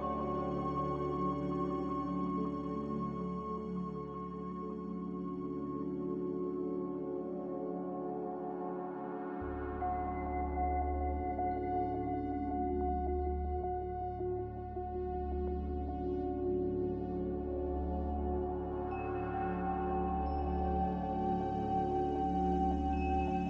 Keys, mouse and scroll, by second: 0.1 typing, 0.3 Return, 4.0 z, 9.5-10.3 typing, 13.2-13.9 typing, 15.1 c, 15.6 click, 19.3 click, 22.2 click.